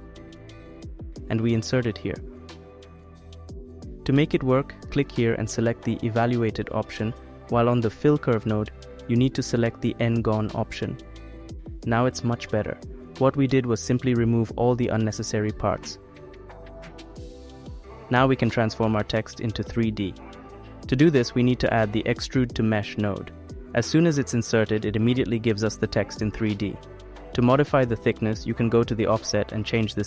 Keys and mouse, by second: 2.5 click, 5.5-8.0 drag, 11.6 click, 15.1 click, 16.4 middle click, 18.3 click, 21.1 click, 21.4 x, 21.4 shift+a, 24.8-26.3 drag, 26.3 middle click.